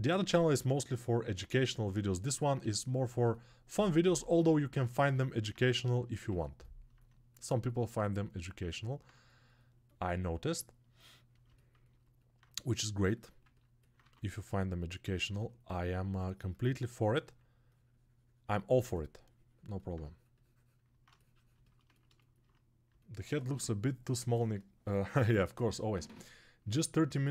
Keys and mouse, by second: 6.1 ctrl+alt+right click, 6.8 click, 7.5 alt+right click, 7.6 click, 7.6 alt+shift+right click, 8.4 ctrl+alt+click, 11.4 ctrl+alt+right click, 11.7 ctrl+alt+click, 12.1 alt+right click, 12.3 click, 13.3-27.3 ctrl+alt+drag, 15.2 alt+2.